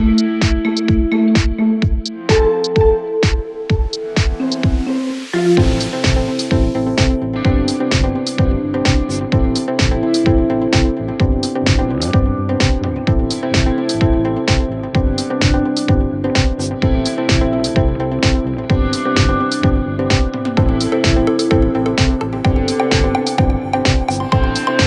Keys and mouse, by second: 0.5-3.3 drag, 1.4 r, 3.3-4.4 middle drag, 4.4-6.6 drag, 4.8 d, 5.8 s, 6.6 middle click, 6.9-8.7 drag, 7.8 s, 8.7-10.2 middle drag, 10.2-23.5 drag, 19.7 shift+d, 22.9 s, 23.5 middle click, 23.9-24.8 drag.